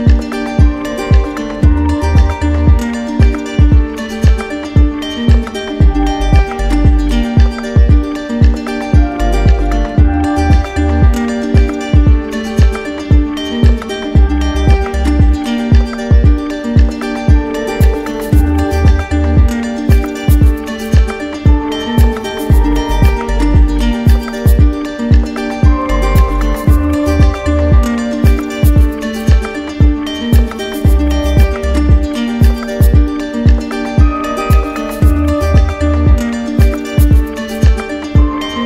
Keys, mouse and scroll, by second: 1.8 right click, 2.7 right click, 5.5 right click, 6.0 alt+right click, 6.4 z, 7.4 click, 8.7 alt+right click, 9.3 right click, 10.6 right click, 15.5 right click, 16.8 click, 20.2 click, 21.5 click, 22.3 click, 23.3 click, 23.7 alt+click, 24.3 alt+click, 27.7 alt+click, 29.6-30.6 right drag, 31.0 z, 32.4-34.5 right drag, 34.5 click, 35.6-36.6 drag.